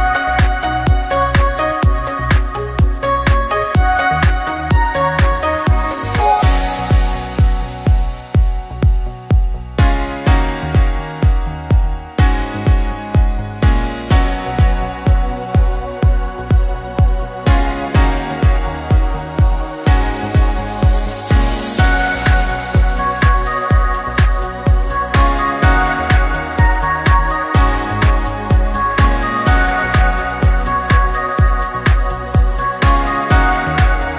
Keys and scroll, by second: 26.6-28.4 typing, 28.5 Return.